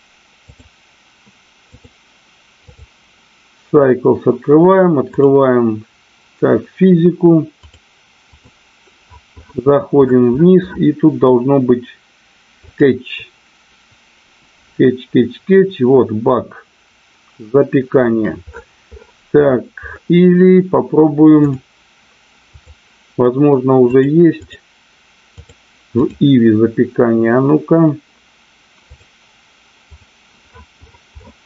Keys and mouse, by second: 1.6-2.9 drag, 22.5 click, 23.9 click, 25.5 click, 28.9 click, 29.8 click.